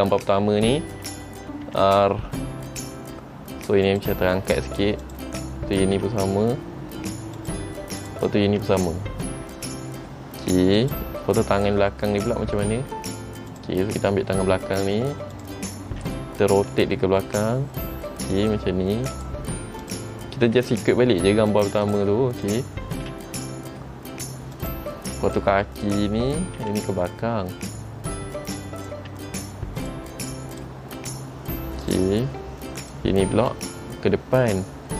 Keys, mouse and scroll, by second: 1.8 r, 6.0 r, 8.1 click, 8.8 r, 12.1 middle click, 13.7 click, 15.5 click, 16.7 r, 20.0 click, 20.6 r, 22.6 click, 23.1 r, 26.0 click, 26.7 r, 29.3 r, 30.7 click, 31.1 r, 33.0 click, 33.5 r.